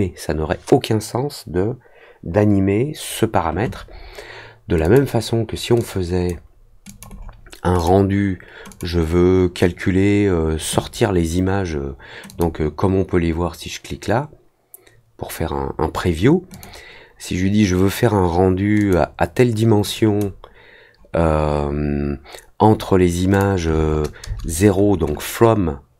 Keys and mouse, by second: 4.8 click, 5.7 click, 6.8 click, 7.7 click, 8.6 click, 12.2 click, 16.5 click, 18.7 click, 19.9 click, 23.3 click.